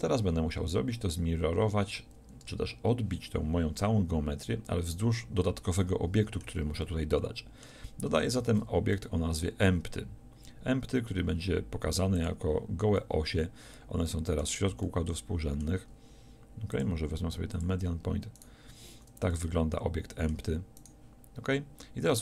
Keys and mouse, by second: 5.9-8.4 middle drag, 8.4 shift+a, 13.0-16.8 middle drag.